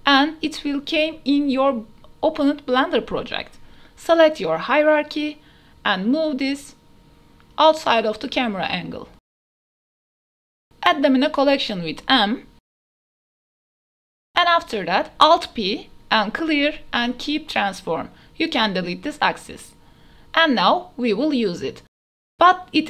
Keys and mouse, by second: 0.7 click, 2.8-3.9 drag, 6.3 click, 7.4 g, 7.7 x, 10.2 m, 12.1 s, 14.0 KP_Decimal, 14.6 click, 14.8 ctrl+alt+z, 14.9 alt+p, 17.2 click, 18.5 Delete, 20.1 KP_7, 21.7 click, 22.4-22.8 drag.